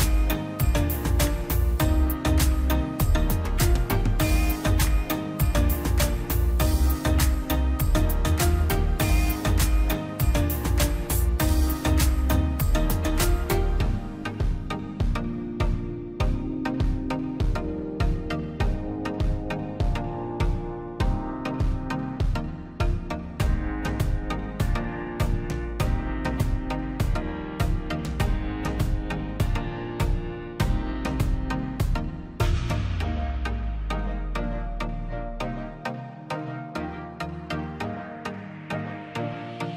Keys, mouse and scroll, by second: 2.5 middle click, 2.8 scroll up 1, 3.0 click, 3.5 scroll down 1, 3.7 middle click, 4.2 scroll down 1, 4.3 middle click, 5.0 scroll up 1, 5.6-7.7 drag, 7.7 space, 7.9 click, 8.3 scroll up 1, 8.5 click, 10.1 p, 10.4 click, 10.7-11.0 scroll down 1, 11.0 middle click, 11.8-12.9 drag, 12.9 scroll down 1, 13.2 middle click, 13.4-13.9 scroll up 1, 13.9 middle click, 14.2-14.6 scroll up 1, 14.6-16.0 drag, 16.0 scroll down 1, 16.3 middle click, 16.7 space, 16.9 click, 17.2 scroll up 1, 17.4 click, 18.3 p, 18.4-20.1 drag, 20.1-21.1 scroll down 2, 20.3 middle click, 21.1-22.3 middle drag, 22.3 space, 22.6 click, 22.8 scroll up 1, 23.7 click, 24.1 middle click, 24.5 scroll up 1, 24.7 click, 25.8 p, 26.0 click, 26.3 scroll down 1, 27.5 click, 30.3 middle click, 31.0 scroll up 1, 31.5-35.1 drag, 35.1 ctrl+z, 36.1 scroll up 1, 36.4-39.7 drag.